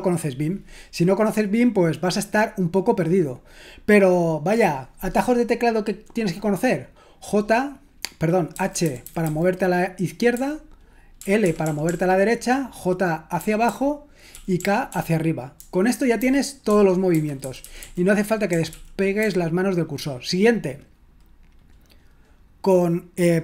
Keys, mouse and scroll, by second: 8.5-9.2 typing, 10.4-11.8 typing, 13.7-19.7 typing.